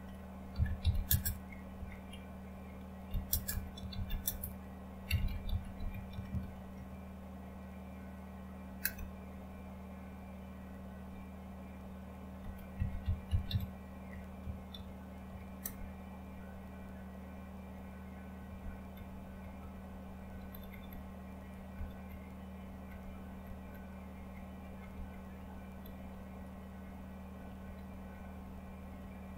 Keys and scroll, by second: 3.0-6.9 typing, 8.8 Return, 14.1-15.2 typing, 15.6 Return, 19.4 Down, 19.6 Down, 19.9 Down, 20.3 Down, 20.5 Down, 20.6 Down, 20.8-21.5 Down, 21.7 Down, 22.0 Down, 22.5 Down, 22.6 Down, 22.8 Down, 22.8 Down, 23.2 Down, 23.4 Down, 23.7 Down, 24.3 Down, 24.8 Down, 25.1 Down, 25.3 Down, 25.7 Down, 26.0 Down, 26.3 Down, 26.8 Down, 27.3 Down, 27.6 Down, 27.8 Down, 28.0 Down, 28.2 Down, 28.4 Down, 28.7 Down, 28.9 Down, 29.2 Down.